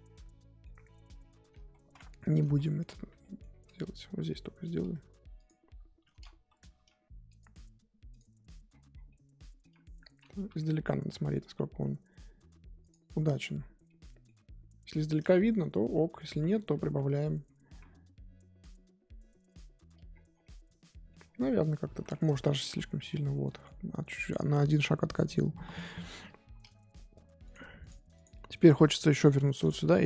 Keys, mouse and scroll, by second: 0.7-1.6 scroll up 3, 1.6 ctrl+z, 1.8 ctrl+z, 2.0 middle click, 2.3 scroll up 3, 2.4 ctrl+z, 2.7 ctrl+z, 3.2 middle click, 3.4-4.0 scroll up 7, 4.0 KP_1, 4.3 scroll up 3, 5.3 click, 6.1 ctrl+z, 6.7 f, 8.1 click, 8.4-9.1 scroll down 12, 9.1 middle click, 9.7-10.3 scroll up 8, 10.3 KP_1, 10.5-11.3 scroll up 6, 11.3-12.8 scroll up 2, 12.8 click, 13.1 scroll down 12, 13.4 scroll up 1, 13.7 scroll down 6, 13.8-15.3 middle drag, 15.3-15.8 scroll up 3, 15.8 KP_2, 16.0-17.4 scroll up 12, 16.2 KP_1, 17.4-17.8 scroll down 3, 17.8-19.4 scroll up 2, 19.4 click, 19.9-20.4 scroll down 14, 20.4 middle click, 21.2-21.7 scroll down 2, 21.7 middle click, 22.1 scroll up 4, 22.3 ctrl+z, 22.9-23.4 scroll up 1, 23.4 middle click, 24.1-24.8 scroll up 1, 27.5-29.1 drag, 29.4-30.0 shift+middle drag.